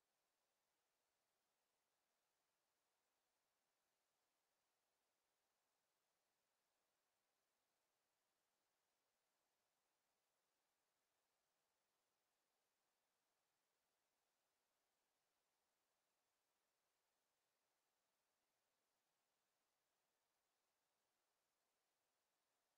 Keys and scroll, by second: 18.0 Delete, 22.3 Delete.